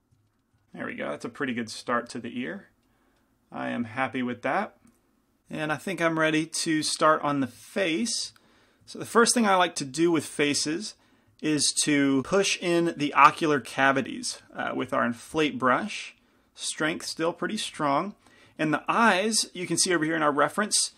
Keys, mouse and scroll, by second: 0.9-5.4 middle drag, 5.8-11.8 middle drag, 14.6 i, 14.6 f, 15.8 shift+f, 17.8 f.